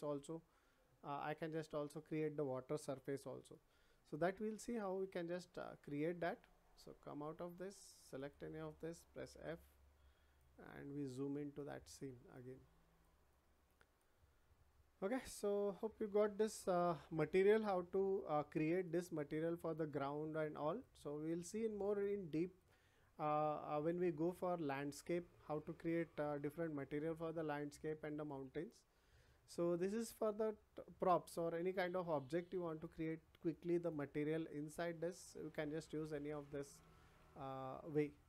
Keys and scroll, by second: 1.3 Escape, 3.0 w, 9.3 f.